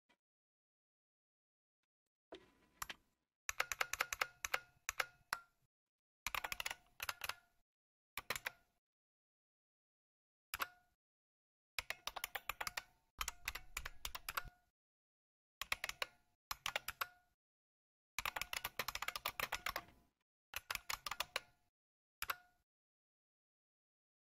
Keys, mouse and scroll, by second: 1.9 click, 3.5 ctrl++, 3.8 ctrl++, 3.9-4.4 ctrl++, 5.0 ctrl++, 6.0-8.3 typing, 10.5 Return, 11.5-22.2 typing.